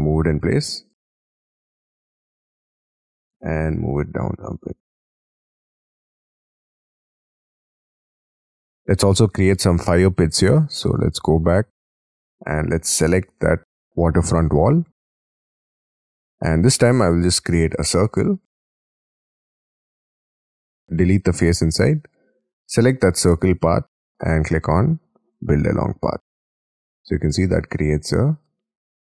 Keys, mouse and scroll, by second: 0.1 m, 2.7 shift+click, 2.9 shift+middle click, 4.9 Up, 5.1 middle click, 5.6-5.9 scroll down 16, 5.9 middle click, 6.5 scroll down 10, 6.8 scroll up 9, 7.1 m, 7.5 scroll down 7, 7.7 Escape, 7.9 middle click, 8.5 scroll up 6, 8.6 scroll down 7, 16.0-16.4 scroll down 13, 16.4-17.7 scroll up 9, 17.7 c, 18.9 space, 19.7 double click, 20.5 double click, 21.2 Delete, 26.0-26.4 scroll up 6, 26.4 middle click, 27.7 scroll down 1.